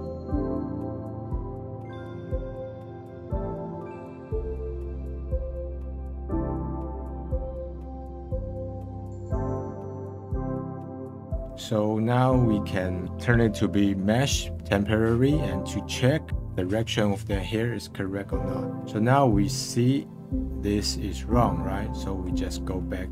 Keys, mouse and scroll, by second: 0.3 click, 0.8 scroll up 4, 1.0 click, 1.2 click, 1.4 scroll down 3, 1.5 middle click, 1.8 click, 1.9 shift+a, 3.3 scroll up 1, 3.4 middle click, 3.6 click, 3.8 scroll up 6, 3.9-4.9 middle drag, 4.9 click, 5.3 click, 6.1-6.7 drag, 7.3-8.5 drag, 10.3 click, 11.2 scroll down 2, 11.3 middle click, 11.9 scroll up 1, 15.1-19.5 middle drag, 19.5-19.8 scroll down 2, 19.8-21.3 middle drag, 21.3-21.8 scroll up 1, 21.8 scroll down 1, 22.1-23.1 middle drag.